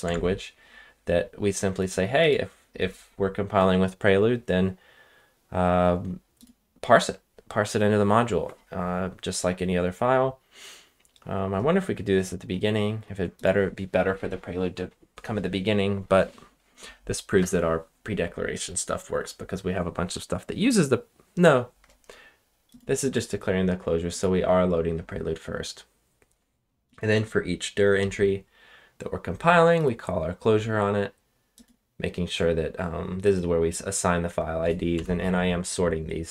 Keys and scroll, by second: 0.0 ctrl+Tab, 34.9 Return.